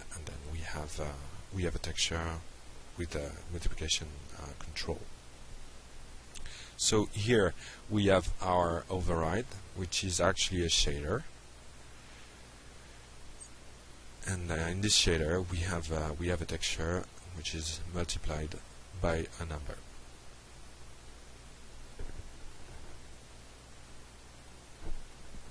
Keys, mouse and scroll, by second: 2.3 click, 3.6 click, 10.4 click, 14.0 click, 15.6-25.5 drag.